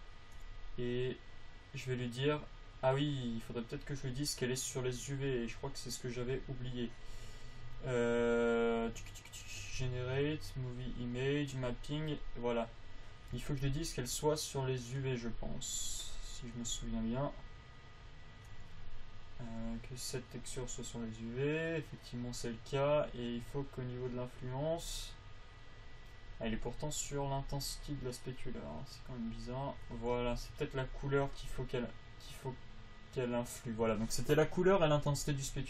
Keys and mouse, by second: 1.7 click, 28.2-32.8 drag.